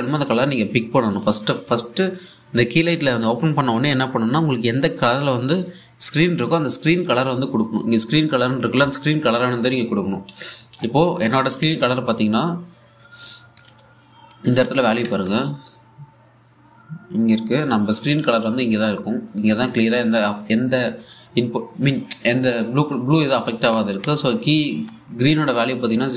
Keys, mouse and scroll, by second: 12.5-15.6 ctrl+drag, 15.7-24.2 ctrl+drag, 24.3 ctrl+Num_Lock, 24.3-26.1 ctrl+drag.